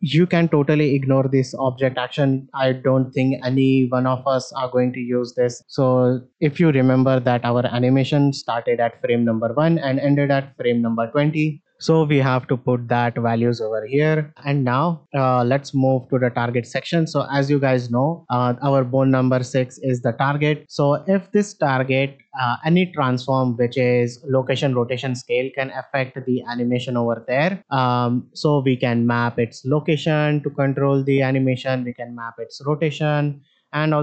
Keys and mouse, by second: 8.4 click, 9.9-11.6 drag, 14.7 shift+middle click, 23.2-23.7 middle drag, 27.6 middle drag, 29.6 click.